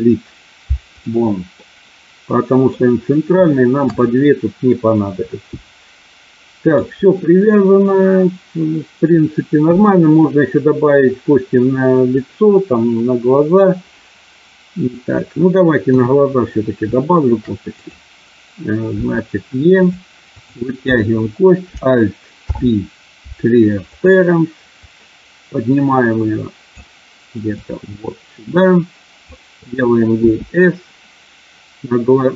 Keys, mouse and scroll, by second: 1.5-2.7 middle drag, 3.4 shift+middle click, 5.3-6.7 middle drag, 9.5 KP_1, 12.4-13.7 middle drag, 15.8 KP_3, 17.7 click, 18.9 e, 19.8 click, 22.4 alt+p, 24.8-26.7 drag, 27.7-29.2 drag, 30.3 s.